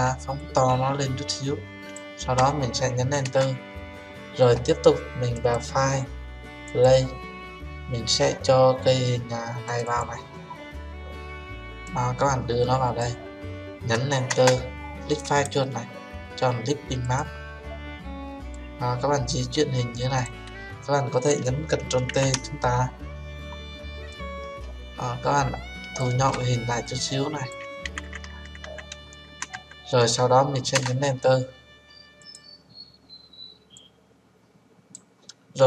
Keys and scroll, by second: 3.2 Return, 14.2 Return, 22.1 ctrl+t, 30.7 Return.